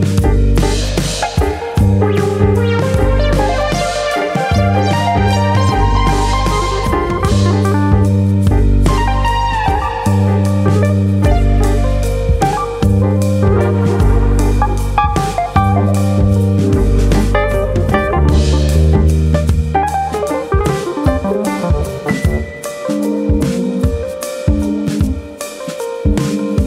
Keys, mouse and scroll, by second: 0.4 click, 1.4 middle click, 2.1 alt+click, 3.0 g, 3.8 click, 4.0 g, 5.5 click, 5.7 middle click, 6.5 alt+click, 7.4 g, 8.3 click, 8.4 g, 10.0 click, 10.2-10.9 scroll down 3, 10.7 shift+middle click, 11.0 middle click, 12.2 click, 12.5 middle click, 13.3 shift+click, 14.0 KP_3, 14.9 click, 16.7 middle click, 17.0-17.6 scroll up 2, 18.7 click, 19.3 shift+click, 20.8 click, 22.2 scroll up 2, 22.5 shift+middle click, 23.1 KP_3, 23.5-24.1 scroll up 1, 24.1 click, 24.1-24.7 scroll up 1, 25.4 click, 25.6 middle click, 26.3 shift+click.